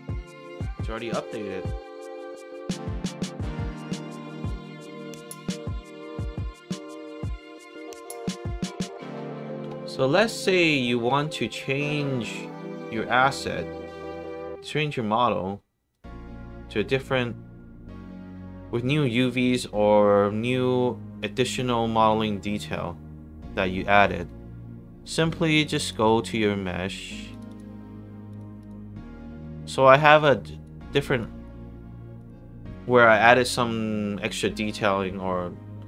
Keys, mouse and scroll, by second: 0.6 alt+right click, 0.9 alt+middle click, 1.3 alt+click, 1.9 alt+middle click, 2.3 alt+click, 3.4 alt+right click, 4.0 alt+click, 4.6 alt+middle click, 5.2 alt+right click, 6.0-7.1 alt+drag, 7.5 alt+right click, 8.8 click, 12.3 click, 13.9 right click, 15.8 click, 19.4 click, 21.1 click, 22.7-23.5 scroll down 2, 23.5-24.7 scroll down 1, 24.7 scroll down 1, 25.6 click, 25.7 click, 27.2 click, 27.4 click, 28.2 click, 28.5 click, 30.1 click, 31.1 drag, 32.1 click.